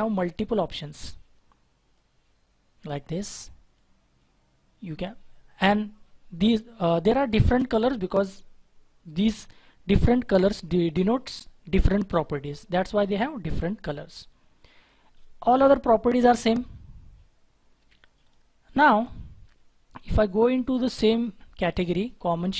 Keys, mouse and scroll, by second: 0.0-0.7 scroll up 1, 0.7-1.4 scroll down 1, 5.4 scroll down 1, 5.4-6.7 scroll up 1, 6.8 scroll down 1, 7.4-10.4 scroll up 1, 16.6 scroll down 1, 16.9-17.4 scroll up 1, 17.8 Delete, 18.6 double click, 18.8 Delete.